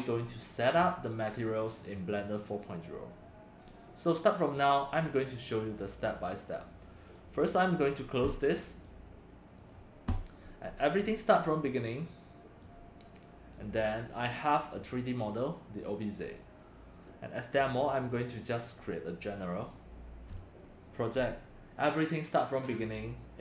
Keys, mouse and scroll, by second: 2.0-6.5 drag, 7.1 click, 8.5 click, 8.8-10.2 drag, 10.7 middle click, 11.0 click, 11.0 click, 11.8-12.6 middle drag, 13.6 click, 14.7 click, 15.8 click, 16.9 click, 17.6 click, 18.6 click, 19.7 click, 20.5 scroll down 1, 21.9 click.